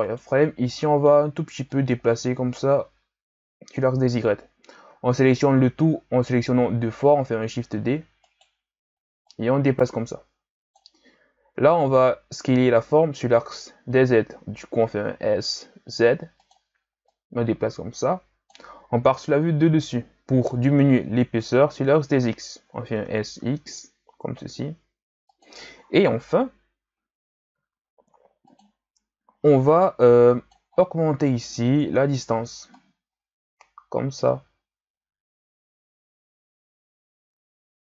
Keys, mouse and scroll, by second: 0.0 right click, 0.2 b, 1.7-4.8 drag, 4.9 a, 5.3 a, 7.4 shift+d, 9.3-12.3 drag, 12.5 s, 17.0-19.3 drag, 19.3 KP_7, 20.8-23.0 scroll up 2, 23.0 s, 26.1 KP_3, 27.5 s, 29.6 right click, 30.0 b, 30.7-31.5 scroll down 10, 31.5-32.8 scroll up 4, 32.8-35.8 drag.